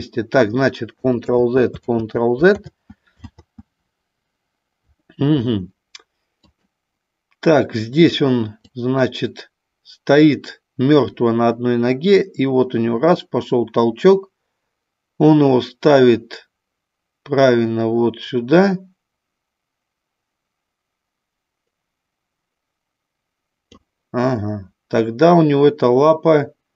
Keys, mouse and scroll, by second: 1.3 ctrl+z, 1.8 ctrl+z, 2.7 ctrl+z, 3.3 ctrl+z, 6.5 click, 8.5-23.8 drag.